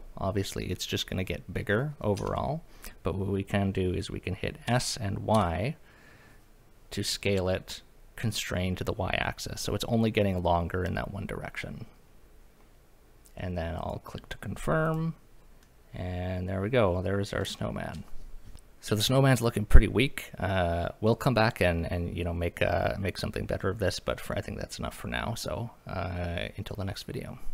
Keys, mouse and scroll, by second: 2.2 Escape, 4.7 s, 5.3 y, 13.8 click, 14.8 click, 15.6-16.6 middle drag, 16.8-17.4 scroll down 2, 17.6 shift+middle drag.